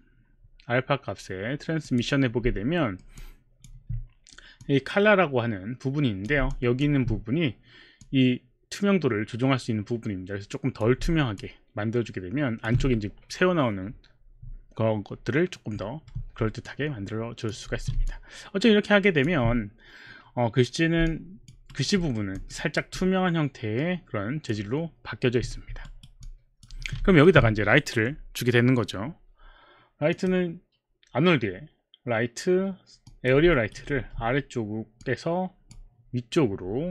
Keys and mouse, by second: 1.8 click, 2.8 alt+middle click, 3.1 alt+click, 4.7 click, 6.5 alt+click, 8.1 click, 11.4 alt+click, 16.7 alt+click, 17.8 q, 18.1 alt+click, 21.1 alt+click, 21.8 alt+right click, 21.8 alt+click, 22.0 alt+right click, 22.1 alt+middle click, 22.4 alt+click, 22.6 alt+right click, 23.2 alt+click, 26.2 alt+right click, 26.7 alt+click, 26.9 q, 27.1 alt+middle click, 30.2 click, 33.1 click, 33.9 alt+right click, 33.9 click, 34.0 e, 35.0 click.